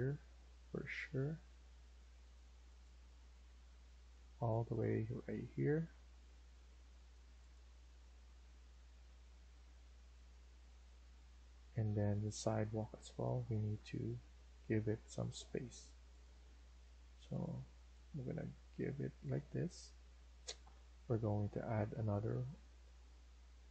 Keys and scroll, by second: 16.3 Escape, 16.5 Escape, 22.8 Escape.